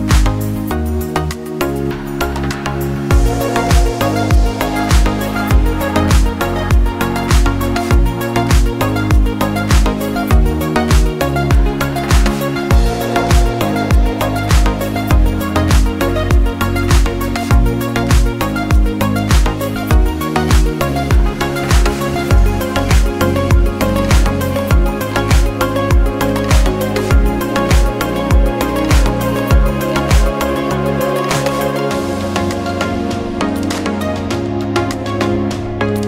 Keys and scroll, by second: 2.5 ctrl+0.